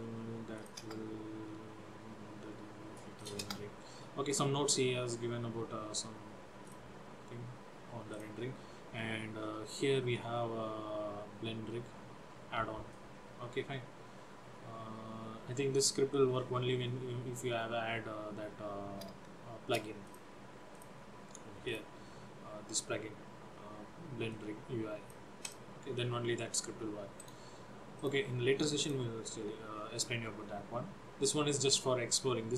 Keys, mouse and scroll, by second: 0.6 click, 1.0 Return, 3.2 click, 3.5 Return, 6.7 click, 10.3-13.4 scroll up 2, 20.1 click, 21.7 click, 24.4 click, 25.5 click, 27.2 right click, 31.1-31.6 scroll up 2.